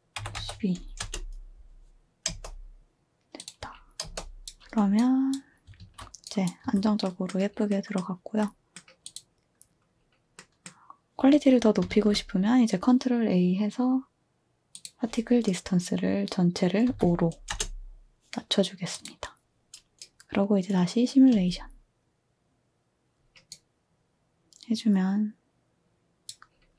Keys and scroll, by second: 0.0-1.0 typing, 2.3 space, 4.0 space, 5.8 a, 6.6 a, 8.9-9.6 typing, 11.9 ctrl+a, 16.9-17.5 typing, 21.0-21.8 typing.